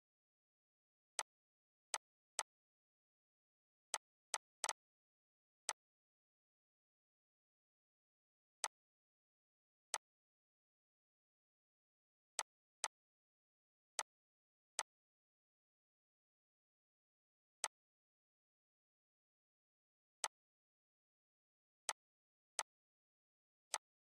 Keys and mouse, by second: 2.0 right click, 3.5 click, 4.0 right click, 7.0 ctrl+g, 8.2 click, 12.1 click, 12.4 right click, 12.8 right click, 13.6 click, 17.2-19.8 drag, 19.8 right click, 22.2 click, 23.4 right click.